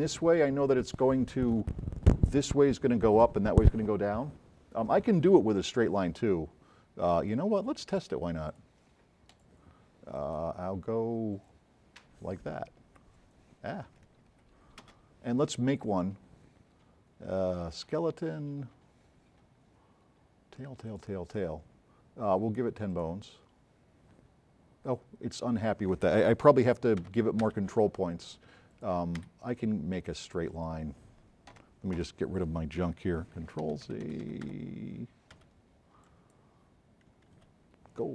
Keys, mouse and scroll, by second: 7.2 click, 8.5 click, 9.3 click, 12.9 F12, 14.3 F12, 14.9 space, 20.9 click, 26.7 z, 27.0 z, 28.8 click, 29.4 Escape, 30.1-30.4 drag, 33.4 z, 35.4 z, 36.1 click, 37.5 z.